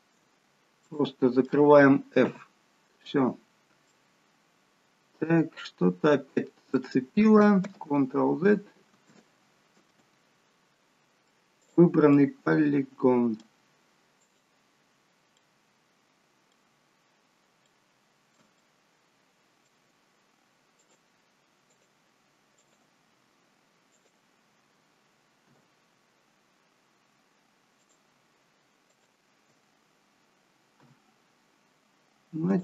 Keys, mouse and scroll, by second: 0.6-0.9 scroll down 2, 0.9 middle click, 2.3 f, 3.5-3.9 scroll up 2, 4.0 middle click, 7.6 ctrl+z, 9.1 ctrl+z, 11.7 click, 12.5 middle click, 14.2 click, 15.4 middle click, 17.2-17.9 scroll up 3, 17.7 middle click, 18.7 shift+middle click, 20.9 click, 23.9 click, 24.7 shift+click, 25.5 f, 27.8 click, 29.0 shift+click, 31.2 f, 32.5 click.